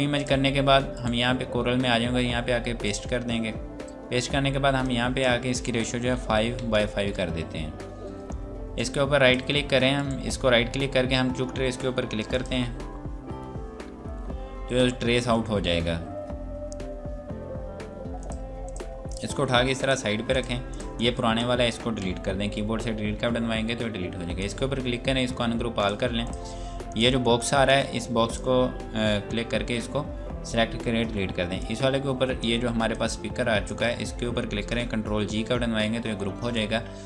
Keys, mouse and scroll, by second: 0.2 click, 0.9 right click, 2.6 click, 6.3 KP_5, 6.4 Tab, 6.6 KP_5, 7.4 Return, 8.8 click, 10.0 right click, 12.4 click, 18.0 click, 22.4 Delete, 24.4 click, 31.2 Delete, 31.6 click.